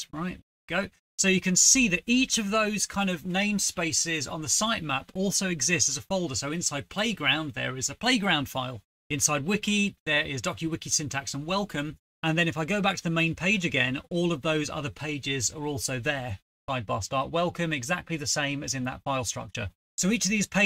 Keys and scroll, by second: 0.0 Return.